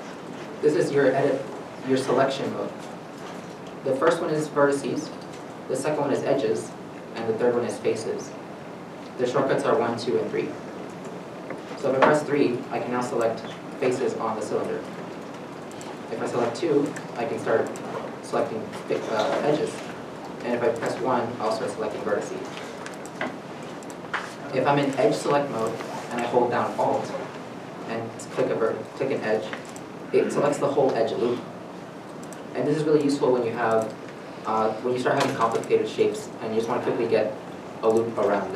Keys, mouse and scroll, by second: 9.8 1, 10.1 2, 10.5 3, 10.9 middle click, 15.3 middle click, 15.5-16.3 scroll, 16.5 middle click, 20.9 1, 23.7 1, 23.7 middle click, 27.1 2, 29.4 alt+click, 32.5 alt+click, 34.8 shift+middle click.